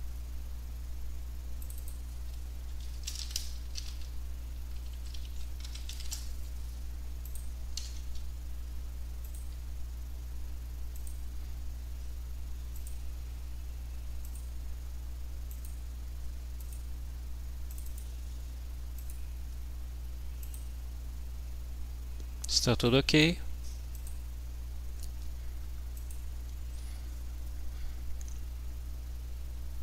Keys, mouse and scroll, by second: 1.7 click, 2.9-6.4 typing, 7.3 click, 7.8 ctrl+s, 9.3 click, 11.0 click, 12.8 click, 14.3 click, 15.5 click, 16.6 click, 17.7-18.4 drag, 19.0 click, 20.4 click, 22.9 click, 24.0 click, 26.3 click.